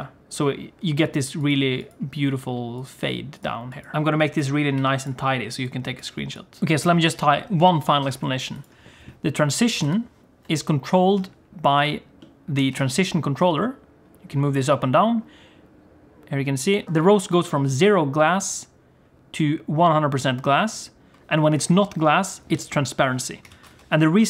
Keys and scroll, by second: 10.1 ctrl+space, 12.7 g, 23.6 alt+a, 23.8 ctrl+s.